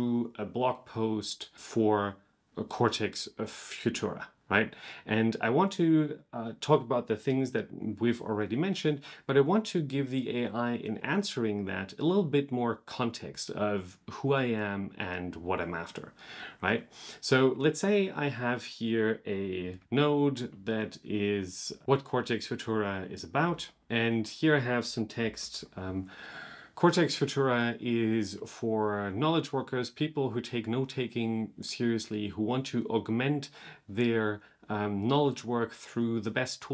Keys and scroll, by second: 21.8 super+/, 23.3 super+/, 25.2 super+/.